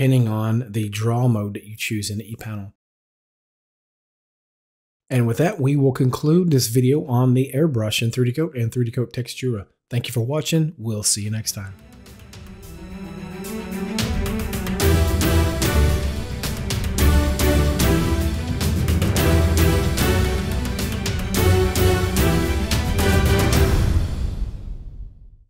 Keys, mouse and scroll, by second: 3.9-5.0 drag, 5.1 double click, 5.5 click, 5.8 click, 6.1 double click, 7.5 click, 17.2-18.0 typing.